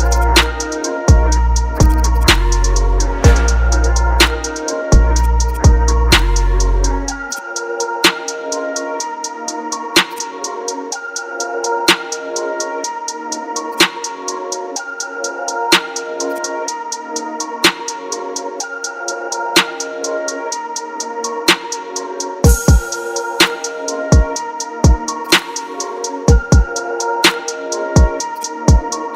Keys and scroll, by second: 1.0-1.8 typing, 4.2 ctrl+d, 6.5 ctrl+t, 9.2 Return, 13.0 ctrl+t, 15.7 Return, 18.1 Down, 19.2 ctrl+KP_Add, 19.7 Down, 20.8 ctrl+t, 21.2 Down, 22.3 Down, 22.6 Up, 23.4 KP_Decimal, 23.9 Return, 24.4 ctrl+KP_Subtract.